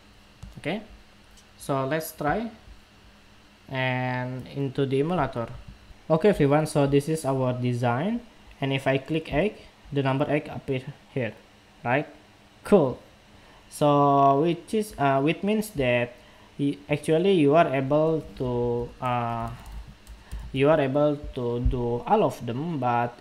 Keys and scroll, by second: 5.5 shift+super+2, 6.9 shift+super+2.